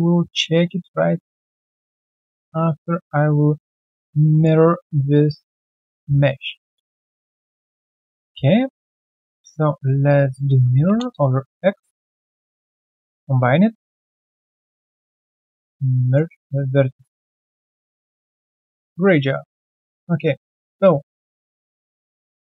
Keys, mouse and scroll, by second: 0.2 alt+middle click, 0.6 alt+click, 1.1 right click, 2.1 alt+middle click, 2.7 alt+scroll down 1, 2.9 alt+click, 3.2 alt+middle click, 6.2 alt+middle click, 7.1 Delete, 7.6 right click, 8.1 typing, 9.7 ctrl+d, 10.9 typing, 11.0 Return, 12.1 shift+click, 12.6 ctrl+alt+c, 12.9 q, 13.2 right click, 14.9 shift+right click, 16.4 alt+middle click, 17.2 typing, 18.4-18.9 typing, 18.9 right click, 21.0 alt+click, 21.2 alt+right click, 21.4 alt+click, 21.7 alt+middle click, 22.0 alt+click.